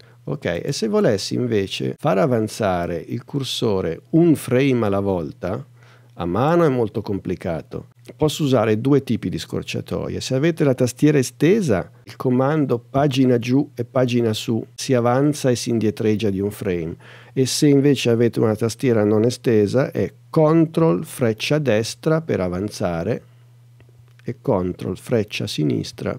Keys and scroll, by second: 21.8 super+Right, 23.1 super+Right, 25.2 super+Left.